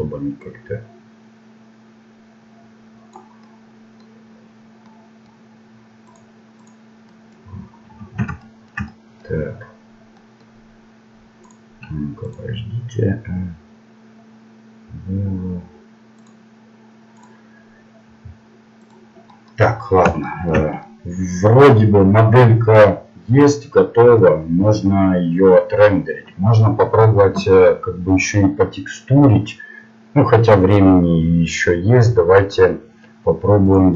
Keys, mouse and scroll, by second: 3.4-6.1 middle drag, 6.1-8.4 drag, 8.4 middle click, 9.0-10.2 middle drag, 11.4-20.8 drag, 20.8-22.7 middle drag, 24.3-25.7 middle drag.